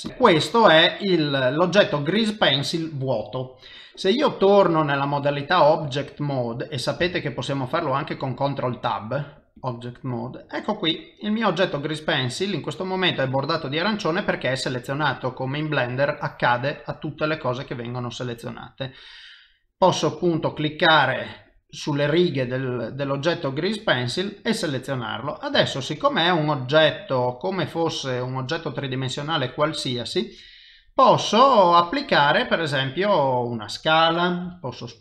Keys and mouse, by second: 0.1 middle click, 0.5 ctrl+middle click, 7.0 ctrl+Tab, 10.0 c, 10.3 middle click, 15.0 click, 15.9 click, 16.7 click, 17.5 click, 18.1 middle click, 19.9 click, 21.3 click, 22.4 click, 23.1 click, 23.8 click, 24.4 middle click, 25.7 ctrl+middle click, 26.2 middle click, 32.5 s, 34.5 g.